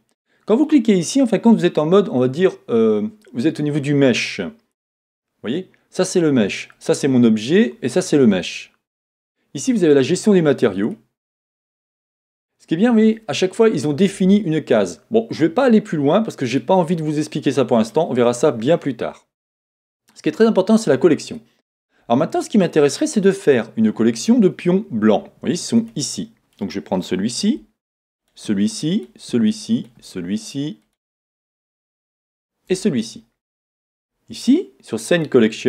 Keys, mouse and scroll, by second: 23.2 middle click, 25.9 click.